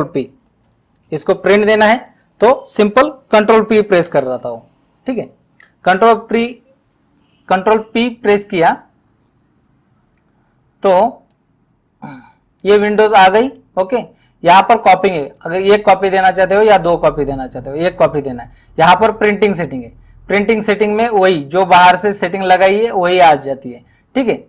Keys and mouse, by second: 3.4 Home, 4.1 typing, 11.3 click, 15.4 click, 19.5 click.